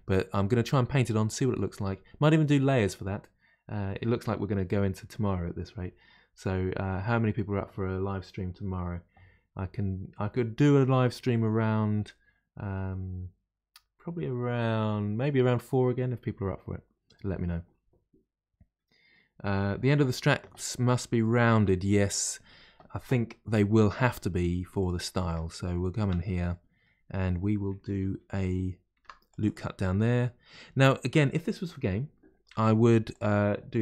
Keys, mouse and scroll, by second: 23.8 middle click, 24.3-24.8 scroll up 1, 24.8 click, 25.2 Tab, 25.6-25.9 scroll up 3, 26.0-28.9 shift+middle drag, 28.9 ctrl+r, 29.9-32.4 middle drag, 32.4 1, 33.1 click.